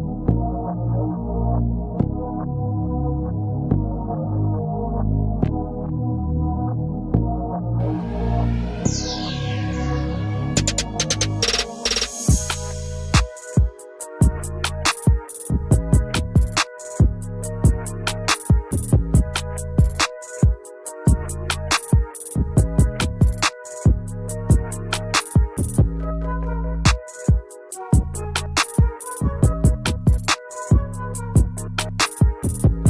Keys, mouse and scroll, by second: 0.1 shift+click, 1.7 double click, 2.3-2.8 alt+scroll down 1, 6.0 alt+click, 8.3 alt+click, 8.7 scroll up 1, 8.8-9.7 scroll down 1, 10.7-11.1 alt+scroll up 1, 11.3 alt+scroll down 2, 11.4 shift+double click, 11.7 shift+click, 12.7 ctrl+shift+click, 13.9 ctrl+shift+click, 15.3 scroll down 1, 15.4-16.0 scroll up 1, 16.0 shift+click, 19.3-19.7 alt+scroll down 1, 20.4 alt+click, 20.8 alt+click, 21.4 scroll up 1, 21.6-21.9 scroll down 1, 21.9 scroll up 1, 22.1-23.7 scroll down 1, 25.6 double click, 28.4 alt+scroll down 1, 28.7 alt+click, 30.2 alt+click, 30.7 alt+double click.